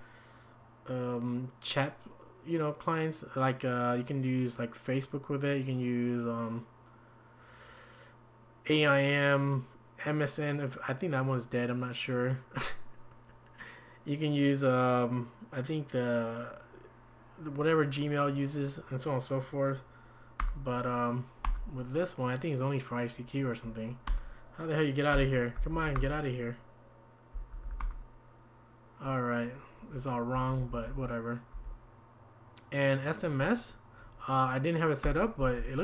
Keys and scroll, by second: 20.4 Return, 24.1 Return, 25.3-26.2 typing, 27.5 typing, 27.8 Return, 30.9-31.5 typing, 35.0 Return.